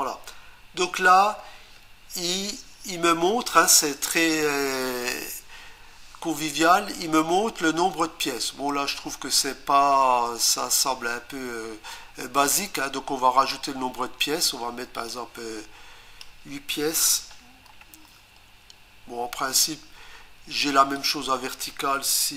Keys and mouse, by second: 0.8 click, 15.1 click, 17.7 8, 21.0 click.